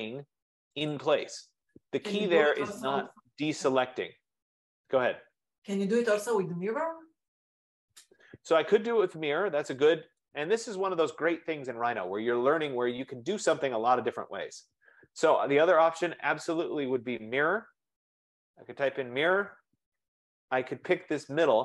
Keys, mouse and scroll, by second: 1.2 click, 2.0-2.3 scroll, 4.0 right click, 10.5-12.5 drag, 13.9-15.0 typing, 15.4 Delete, 16.7 click, 17.8-19.4 typing, 19.7 Return.